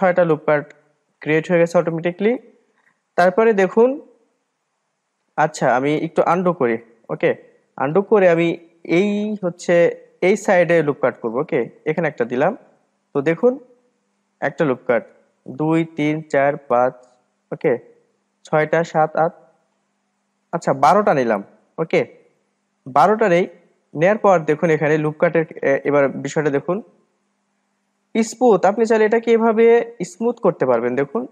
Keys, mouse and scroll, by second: 6.4 ctrl+z, 6.5 ctrl+z, 6.8 ctrl+z, 6.9 ctrl+z, 8.8-11.9 drag, 12.2-15.1 drag, 15.8-23.6 drag, 23.6-24.0 scroll down 2, 24.0-26.0 middle drag, 26.0-26.4 scroll up 1, 28.6-31.0 drag, 31.0-31.3 middle drag.